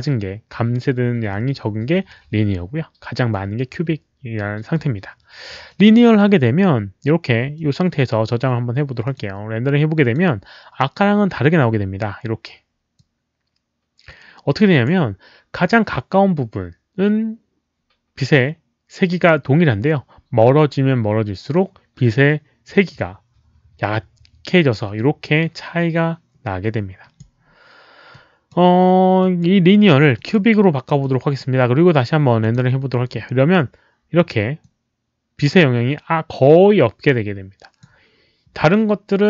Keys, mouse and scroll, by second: 5.6 click, 7.5-7.8 drag, 9.0 click, 10.0 click, 12.9-14.8 drag, 22.7-27.1 drag, 28.0-28.4 drag, 29.1 click, 30.1 click, 30.9-31.3 drag, 32.3 click, 34.5-37.8 drag.